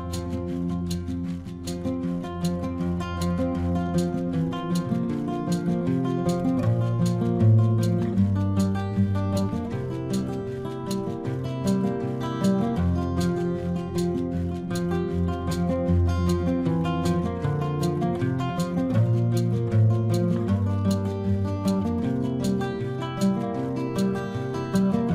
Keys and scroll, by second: 5.6 ctrl+alt+z.